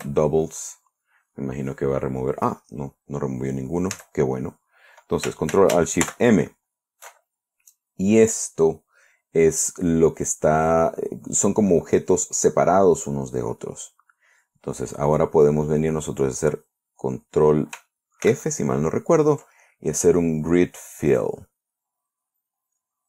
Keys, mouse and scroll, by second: 0.0-0.2 typing, 0.5 Return, 4.4 a, 6.5 ctrl+alt+shift+m, 18.7 ctrl+f, 21.6 click.